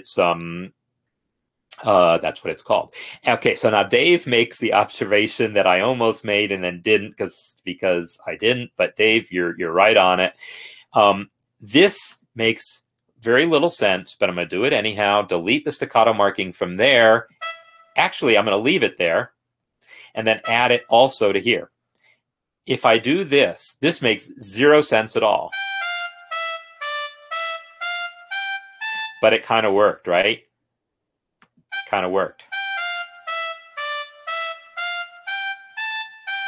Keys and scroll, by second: 15.3 BackSpace, 19.7 ctrl+z, 21.2 shift+s, 21.7 Escape, 25.6 space, 29.1 space, 32.5 space.